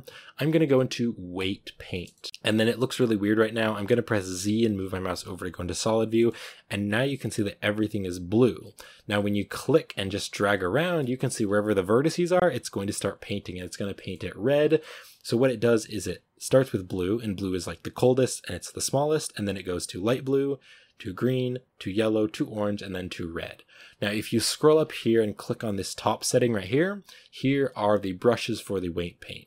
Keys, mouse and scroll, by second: 1.4 click, 1.8-3.1 middle drag, 3.1-3.5 scroll up 1, 4.7 z, 5.2 z, 6.0-8.4 middle drag, 8.4-9.7 scroll up 3, 8.5 middle drag, 9.7 scroll up 2, 10.0 click, 10.8-11.6 scroll down 2, 10.9 middle click, 11.6-13.0 drag, 13.0-13.8 scroll down 1, 13.8 shift+middle drag, 14.0-15.7 scroll up 2, 14.5 shift+middle click, 15.7 scroll up 1, 20.4 scroll up 1.